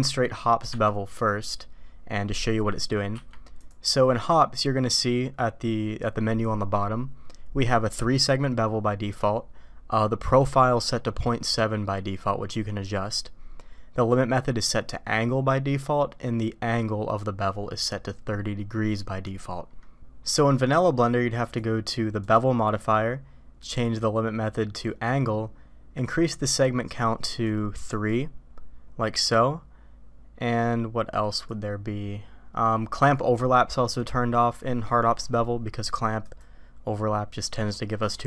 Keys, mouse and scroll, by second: 3.1 q, 21.4-22.3 drag, 23.7-25.2 drag, 27.2 click, 27.9 click, 31.4 click, 36.2 click.